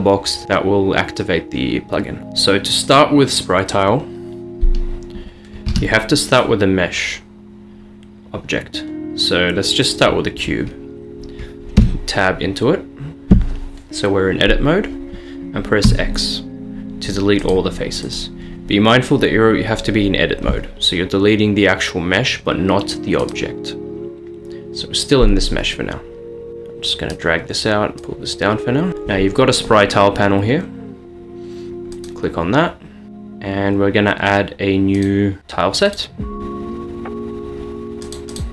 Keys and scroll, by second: 5.8 a, 11.9 Tab, 15.9 x, 26.5 Tab.